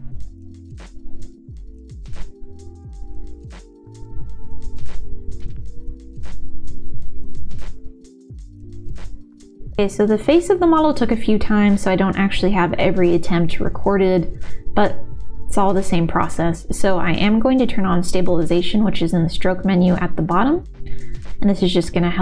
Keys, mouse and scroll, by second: 0.1 shift+x, 0.4 click, 0.6 click, 0.9 middle click, 1.1 click, 1.5 click, 1.6 click, 2.0 middle click, 2.3 middle click, 2.5 middle click, 2.6 click, 3.5 middle click, 3.9 click, 4.2 middle click, 4.5 middle click, 4.6 click, 5.0 middle click, 5.4 shift+x, 5.6 middle click, 6.0 click, 6.2 click, 6.4 click, 6.5 click, 6.6 middle click, 6.8 click, 7.5 middle click, 7.8 click, 8.1 middle click, 8.3 click, 8.6 middle click, 9.0 ctrl+z, 11.7-12.9 drag, 13.2 ctrl+z, 13.4-14.6 drag, 16.1-17.4 drag, 17.4 ctrl+z, 18.3-20.2 drag, 20.8 ctrl+z, 22.0 click.